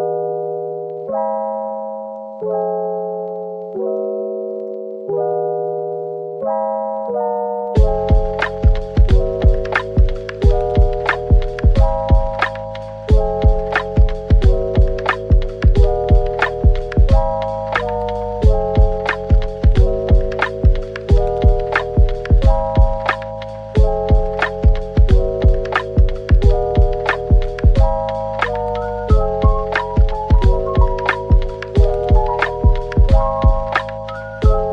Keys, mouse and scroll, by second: 0.9 double click, 1.2 Tab, 1.9 middle click, 4.0-5.0 typing, 5.4 middle click, 6.2 shift+click, 6.9 i, 8.6 right click, 9.8 middle click, 10.2 Tab, 10.9 middle click, 11.6-12.6 scroll down 1, 12.9 shift+click, 15.4 typing, 16.5 right click, 18.2 shift+click, 19.2-19.5 typing, 23.8 Tab, 24.3-26.0 typing, 28.3 typing, 29.9 typing, 30.8 scroll up 1, 31.6-32.6 typing, 33.5 middle click.